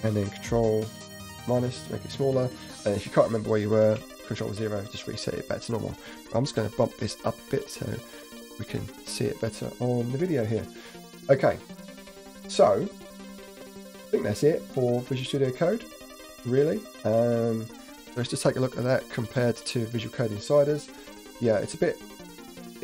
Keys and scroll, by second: 1.1 ctrl+-, 1.1 ctrl+-, 1.6 ctrl+-, 2.7 ctrl+=, 2.9 ctrl+-, 2.9 ctrl+-, 3.2 ctrl+=, 3.2 ctrl+=, 3.9 ctrl+0, 4.0 ctrl+0, 6.7 ctrl+=, 8.4 ctrl+=, 18.2 alt+Tab, 19.4 alt+Right.